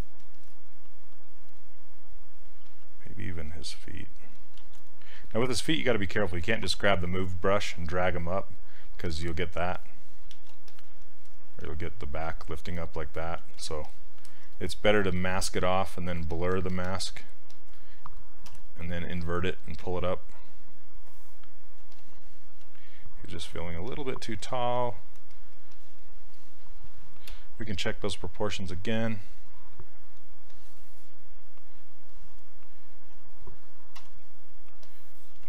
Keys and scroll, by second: 2.7 s, 4.7 ctrl+z, 6.5 s, 10.4 ctrl+z, 13.4 ctrl+z, 18.5 w, 23.5 q, 27.3 z, 34.0 z.